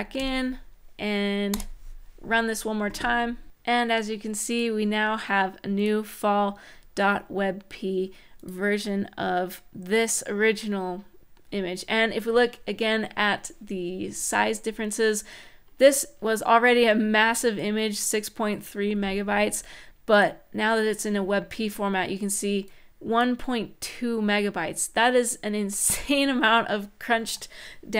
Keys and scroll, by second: 1.2 Return.